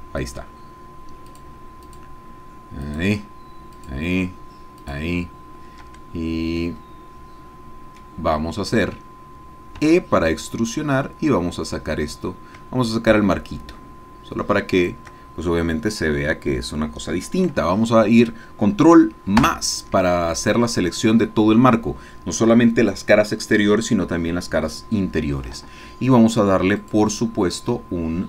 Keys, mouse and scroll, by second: 0.4 shift+click, 1.3 shift+click, 1.9 shift+click, 3.1 shift+click, 3.7 shift+click, 5.0 shift+click, 6.1-6.6 shift+scroll down 1, 6.6-8.1 drag, 8.1 middle click, 9.8 e, 14.8 shift+click, 19.5 ctrl+KP_Add, 26.8 click.